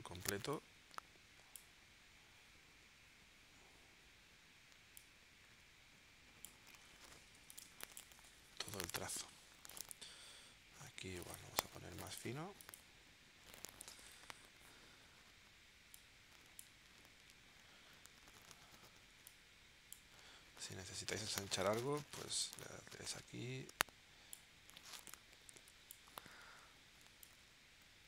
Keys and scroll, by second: 7.3 v, 7.6 space, 8.5 space, 21.5 shift+w.